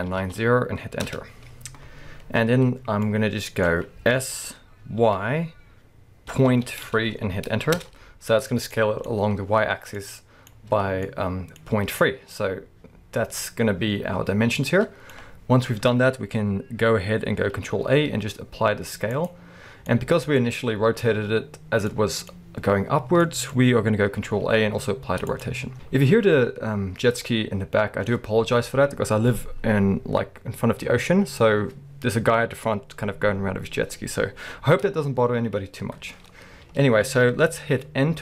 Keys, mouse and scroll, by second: 1.1 Return, 3.0 middle click, 4.2 s, 8.7 middle click, 11.7-38.2 middle drag, 11.7-12.4 scroll up 2, 17.8 ctrl+a, 24.2 ctrl+a, 25.7 KP_1, 34.9-35.8 scroll down 2, 35.8-37.4 scroll down 1, 37.4-38.2 scroll up 2.